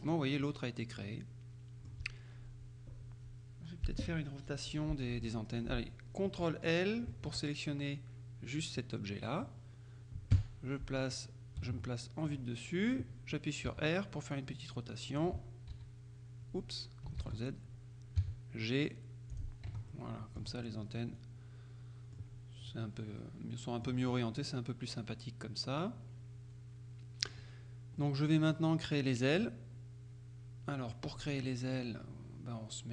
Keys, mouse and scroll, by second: 0.5 click, 0.6-2.5 middle drag, 7.2 ctrl+l, 10.4 KP_7, 11.8-12.9 shift+drag, 13.8 r, 15.2 click, 15.8 h, 17.3 ctrl+z, 19.4-20.9 drag, 19.8 Tab, 20.5 z, 23.3-24.4 drag, 28.1-29.1 drag, 29.5-31.5 drag, 31.2 Tab, 31.7-32.9 middle drag.